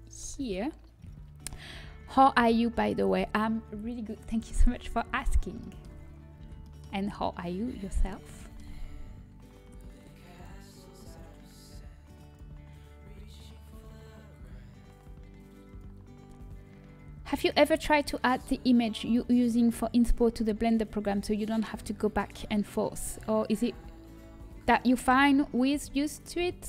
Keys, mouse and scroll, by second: 7.9-10.4 middle drag, 15.6-19.3 drag.